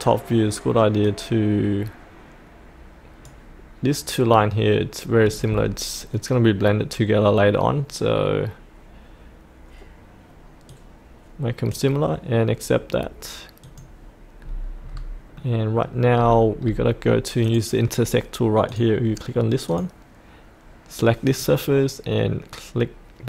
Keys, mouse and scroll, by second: 14.4-15.3 scroll up 1, 15.3 middle click, 16.1-16.7 scroll down 1, 16.8-17.4 scroll down 1, 17.4 click.